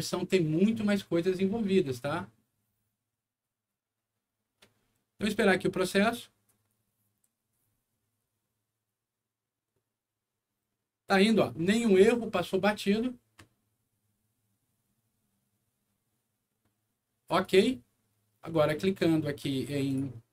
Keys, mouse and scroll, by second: 17.3 click, 19.8 click.